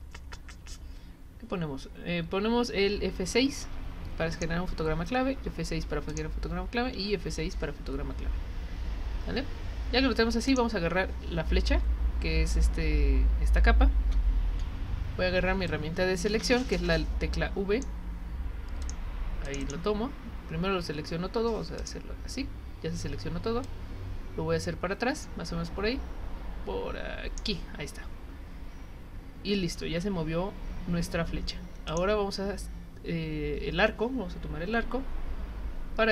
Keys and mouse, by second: 3.6 F6, 4.3 click, 6.1 click, 7.0 F6, 10.4 click, 15.6 click, 18.8 click, 19.4 click, 19.6 click, 21.8 click, 23.6-27.4 drag, 31.9 click.